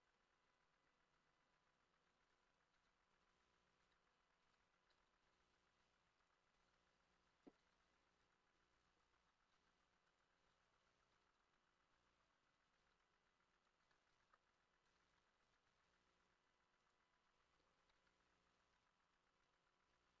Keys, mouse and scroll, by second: 0.0 Escape, 0.0-1.9 drag, 2.3-8.6 ctrl+drag, 2.3 ctrl+middle click, 2.4 ctrl+z, 2.8 s, 3.2 x, 3.9 Escape, 4.5 e, 5.0 Escape, 5.3 s, 6.6 s, 6.7 x, 7.7 e, 8.9 shift+middle click, 10.5 s, 11.2 Escape, 12.0 middle click, 12.8 ctrl+middle click, 12.9 ctrl+z, 13.9 g, 14.2 Escape, 14.9 e, 15.2 Escape, 15.5 s, 15.8 x, 17.4-20.2 drag, 17.5 middle click, 17.9 s, 18.0 y, 20.0 middle click.